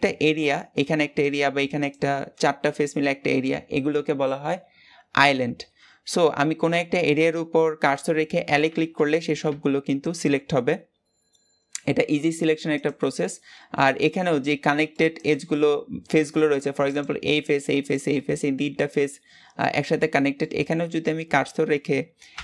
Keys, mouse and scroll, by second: 1.1 click, 1.8 click, 8.3 l, 9.4 g, 12.7 click, 13.0-15.1 middle drag, 15.1 click, 15.5-16.8 middle drag, 16.8 click, 17.2 click, 17.7 click, 18.0-20.4 middle drag, 20.4 scroll up 2, 22.1 l.